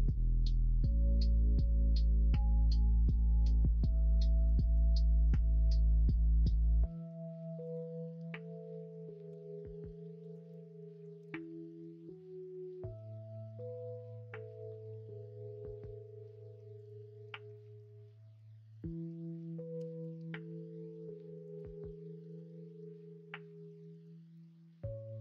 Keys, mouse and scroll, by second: 0.0 2, 1.5 1, 3.4 ctrl+z, 9.2 s, 10.3 ctrl+z, 11.2 s, 17.5 middle click, 19.7 g, 22.1 middle click, 22.3 Tab, 22.8-24.0 middle drag, 24.3-25.2 middle drag.